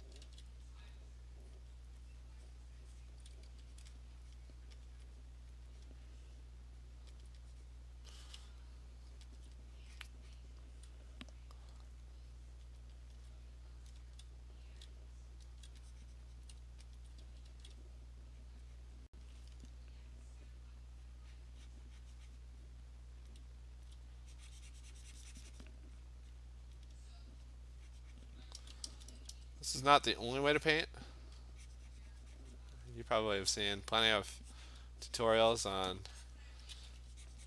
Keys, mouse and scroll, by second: 0.1 [, 0.3 [, 0.7 click, 1.0 click, 1.6 click, 1.9 click, 2.2 click, 2.6 click, 3.2 click, 3.3 alt+click, 3.3 ], 3.6 ], 3.9 click, 4.0 click, 4.4 click, 4.9 alt+click, 5.6 click, 5.9 click, 7.3 alt+click, 7.8 click, 9.4 alt+click, 9.9 click, 10.1 click, 10.4 click, 10.9 alt+click, 12.8 alt+click, 13.2 alt+click, 14.0 [, 14.7 [, 15.5 [, 16.5 click, 17.0 alt+click, 17.3 [, 17.6 [, 17.8 click, 18.3 click, 18.3 alt+click, 18.6 click, 18.9 click, 19.2 alt+click, 20.5 click, 21.4 click, 23.3 click, 23.8-24.2 alt+click, 25.6 click, 26.0 click, 26.5-28.5 alt+click, 26.7 click, 27.6 click, 28.3 alt+click, 28.4 click, 28.6 ], 28.8 ], 29.0 ], 29.3 ], 29.9 click, 30.8 click, 32.5 click, 34.0 alt+click, 34.1-36.7 alt+click, 35.6 click, 36.4 scroll, 36.6 click, 36.6 click, 36.8 click.